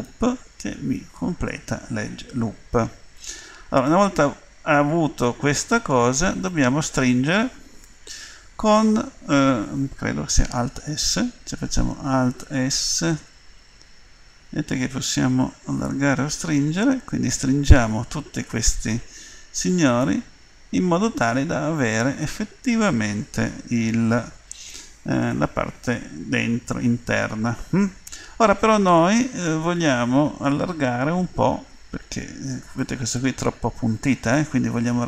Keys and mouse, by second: 3.9 click, 5.8-13.3 middle drag, 13.3 alt+s, 32.8-35.0 middle drag.